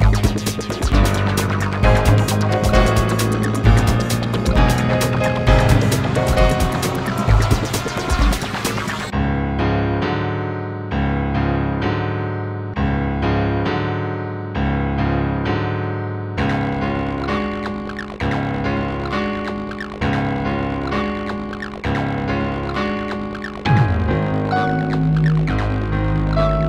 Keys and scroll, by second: 1.4 ctrl+z, 2.3 ctrl+z, 3.1 ctrl+z, 19.0 w.